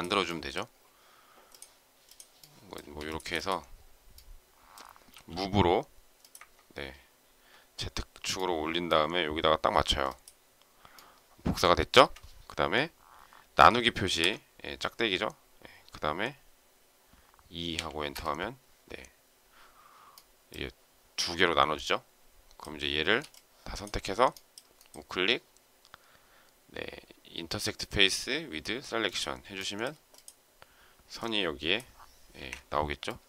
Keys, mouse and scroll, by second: 2.7 space, 5.1 m, 8.3 shift+middle click, 10.9 shift+middle click, 18.1 Return, 23.0 space, 32.4 Insert.